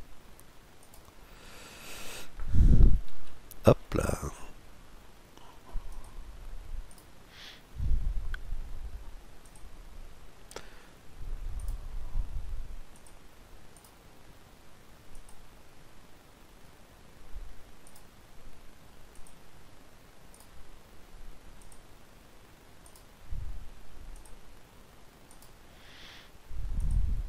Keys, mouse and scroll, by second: 2.8 KP_Decimal, 3.4-5.7 middle drag, 5.7-7.3 drag, 6.5-9.2 right drag, 9.2-10.8 drag, 9.9 scroll down 1, 10.1-12.7 middle drag, 11.2-13.0 right drag, 12.7-16.5 drag, 13.4-15.2 right drag, 15.5-17.9 middle drag, 17.5-19.4 right drag, 18.9-20.6 drag, 20.0-24.4 right drag, 21.4-23.2 drag, 23.8-25.8 drag, 24.9-27.0 right drag, 26.4-27.2 drag, 27.0-27.2 middle drag.